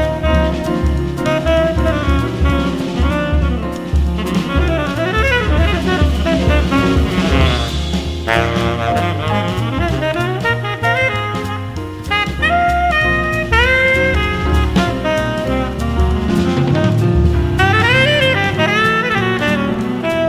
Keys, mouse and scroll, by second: 1.4 middle click, 2.2 x, 3.2-4.9 drag, 3.9 space, 10.4 d, 13.0 a, 13.7 a, 15.2 a, 15.7 a, 17.9 space.